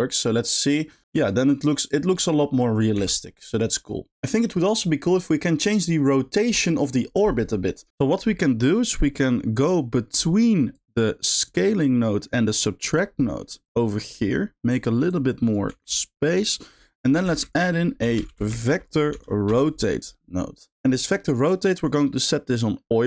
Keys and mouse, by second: 1.2 g, 2.9 g, 8.4 middle click, 9.2 middle click, 10.0 middle click, 10.7 click, 13.3 middle click, 13.8 drag, 14.1 g, 15.1 click, 15.7 g, 16.6 click, 16.9 middle click, 17.3 shift+a, 21.0 middle click, 21.9-23.0 drag.